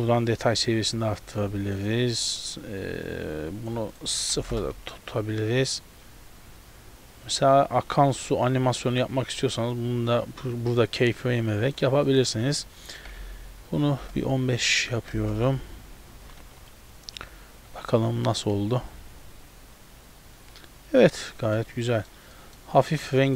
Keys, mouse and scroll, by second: 1.0 click, 2.2 click, 4.0 click, 5.8 click, 12.1 click, 15.2 KP_0, 16.4 ctrl+b, 17.4 z, 17.8 a, 17.9 a, 21.7 middle click, 21.7-22.4 scroll up 1, 22.4 middle click.